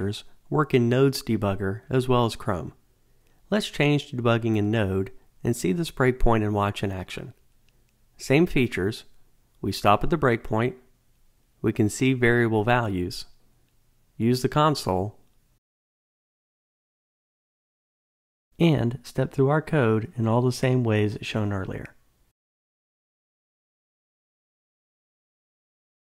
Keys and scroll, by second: 4.2 super+/, 7.0 ctrl+d, 12.8 Return, 17.9 F8.